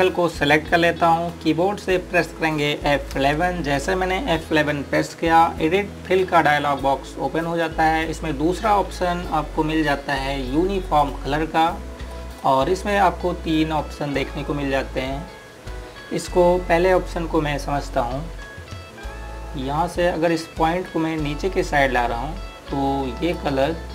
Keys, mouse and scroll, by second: 3.5 F11, 7.6 click, 11.6 click, 21.4 click.